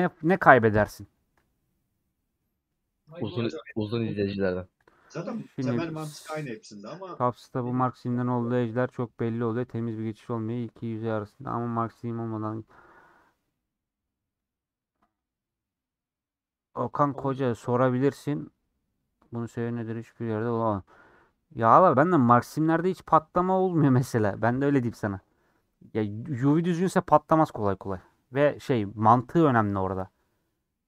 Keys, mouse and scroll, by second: 0.3 click, 0.8 a, 1.5 scroll down 2, 1.9 middle click, 2.4 scroll down 1, 2.6 middle click, 3.6 /, 4.4 Tab, 28.2-30.8 middle drag.